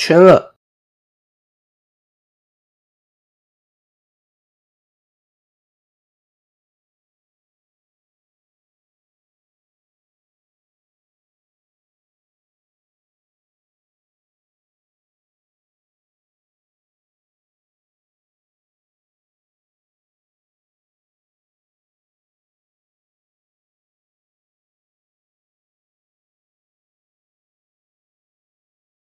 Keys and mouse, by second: 1.9 KP_1, 3.5-5.7 drag, 6.3 middle drag, 7.1 KP_7, 8.3 shift+middle click, 10.3 click, 11.9 ctrl+2, 12.9 middle click, 13.5 KP_1, 14.8 click, 15.5-17.0 drag, 18.1 middle click, 19.0 KP_7, 19.8 shift+middle click, 20.4 typing, 21.5-22.5 drag, 23.4-24.7 middle drag, 25.3-26.7 drag, 27.0-28.3 middle drag, 28.5 KP_7.